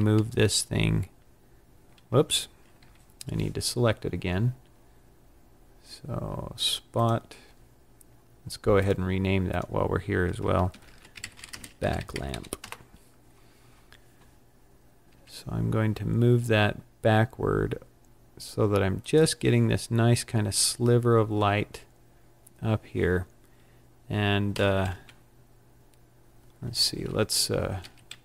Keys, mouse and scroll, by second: 2.0 Escape, 5.6-6.8 scroll down 4, 6.8 click, 8.7 click, 9.4 click, 14.9 g, 19.1 click, 24.5 g, 27.7 g.